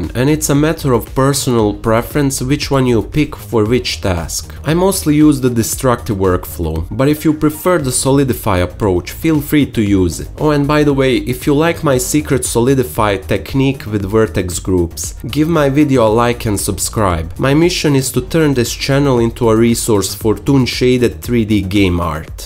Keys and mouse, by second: 6.3 F5, 6.8 Tab, 8.7 middle click, 10.5 middle click, 13.3-14.0 middle drag, 15.1 ctrl+z, 17.9 Tab, 18.1-20.1 alt+drag, 20.6 n, 20.8 n, 21.2 t, 22.3 KP_Divide.